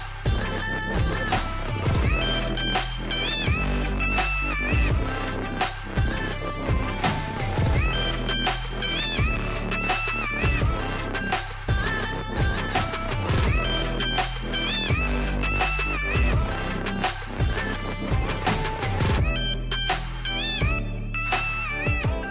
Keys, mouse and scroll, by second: 0.3 click, 4.1 click, 7.4 Delete, 8.5 click, 9.9 click, 11.4-12.9 drag, 12.9 ctrl+z, 13.5-21.9 drag.